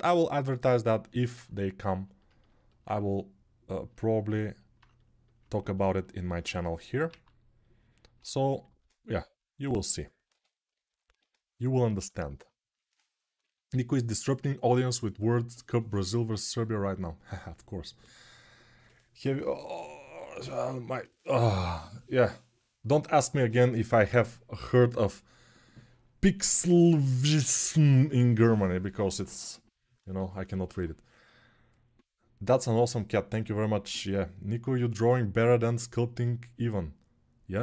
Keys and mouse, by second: 5.8-10.9 alt+right drag, 6.9 alt+q, 8.4 shift+r, 10.3 ctrl+r, 10.9-37.6 shift+drag.